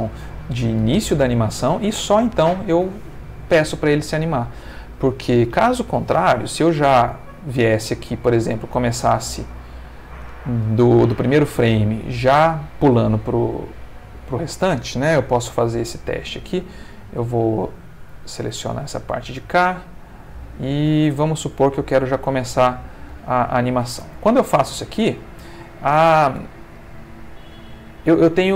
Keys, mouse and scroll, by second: 4.7 Escape, 8.9 click, 13.6 click, 15.3 x, 15.6 click, 16.8 click, 17.3 click, 18.1 ctrl+click, 18.9 ctrl+g, 21.3 click, 22.0-23.0 drag, 24.0 space.